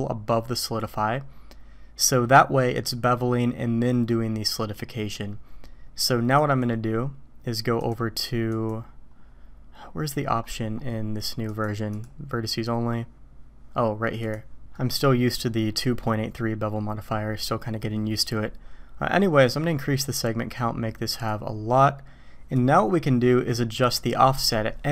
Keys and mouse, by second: 6.3 click, 7.8 click, 8.5 click, 11.5 click, 14.2 click, 14.7-15.7 drag, 15.7 middle click, 19.8-21.4 drag, 22.5-24.9 drag.